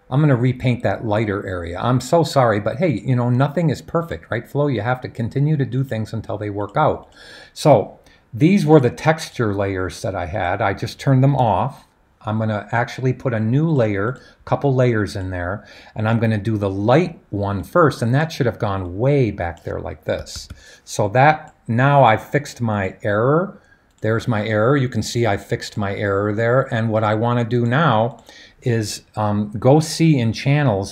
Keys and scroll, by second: 20.1 typing.